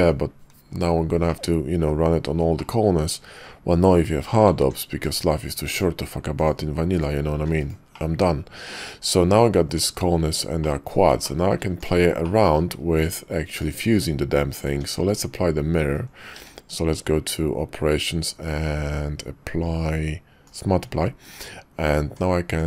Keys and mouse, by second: 1.3-1.8 drag, 2.5-2.9 drag, 4.6 alt+x, 5.7 shift+right click, 6.4 shift+right click, 6.9 shift+right click, 7.9-9.2 drag, 9.6 Tab, 10.6 click, 11.2 shift+click, 11.8 click, 12.2 click, 14.6 Tab, 16.3 q, 21.3 Tab, 22.0 Tab, 22.5 click.